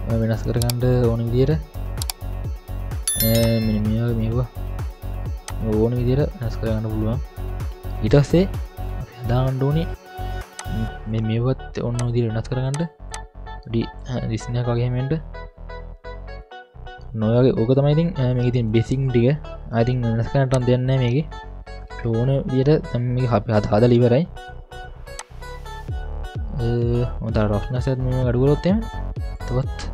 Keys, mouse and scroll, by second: 3.4-5.0 drag, 5.4-7.8 drag, 7.8 middle click, 8.0 scroll up 2, 9.3 middle click, 10.6 click, 16.0-16.4 scroll up 2, 16.4 middle click, 20.5-23.0 drag, 25.2-29.4 drag.